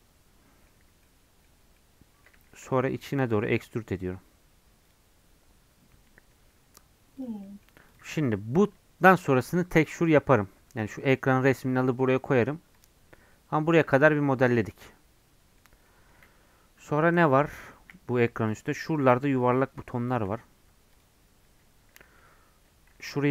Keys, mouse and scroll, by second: 0.7 Tab, 1.0 middle click, 1.6 Tab, 1.7-3.3 middle drag, 3.3 e, 7.2 click, 7.4 middle click, 7.9 click, 8.6 Tab, 12.2 scroll down 2, 12.8 click, 13.1 scroll up 1, 13.3 middle click, 13.8-14.2 scroll up 1, 14.2-15.7 middle drag, 15.7 scroll down 1, 15.9-17.4 middle drag, 17.4 KP_3, 18.2-18.7 scroll up 2, 19.9 shift+middle click, 20.7 Tab, 20.9 click, 21.4 Tab, 23.1 click.